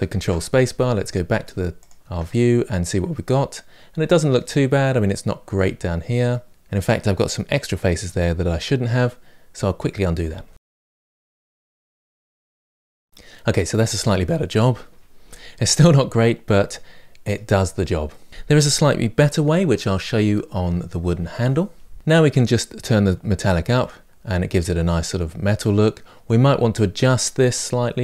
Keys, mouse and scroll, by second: 0.6-1.6 middle drag, 1.6 click, 2.0 Tab, 2.4-2.9 scroll down 1, 2.9-6.5 middle drag, 6.5-7.0 scroll up 1, 7.0-8.0 ctrl+z, 8.2 middle click, 9.9 click, 12.6 ctrl+space, 12.8 Tab, 12.8 middle click, 12.9-13.4 scroll down 3, 15.6-17.4 middle drag, 17.4-17.9 scroll down 2, 17.9-20.4 middle drag, 22.0 middle click, 22.8-24.0 drag, 24.0-26.4 middle drag, 26.4-27.1 scroll up 2, 27.1-28.0 middle drag.